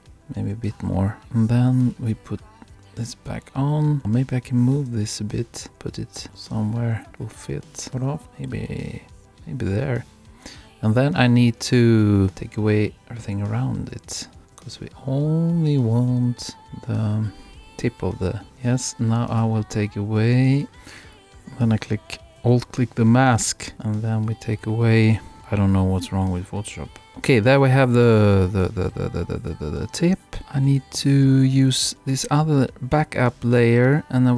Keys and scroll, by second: 8.2 super+Left.